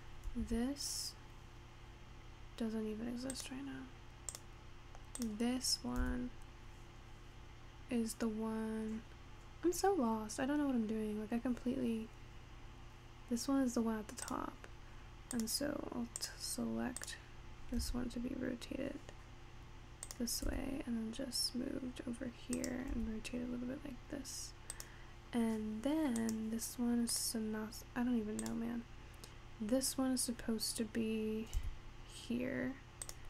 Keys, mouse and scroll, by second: 0.4 g, 4.3 click, 5.3 click, 6.0 g, 15.4 click, 16.3 click, 17.0 click, 17.8 r, 20.6 g, 23.0 r, 26.2 click, 27.2 click, 28.5 click, 31.6 g.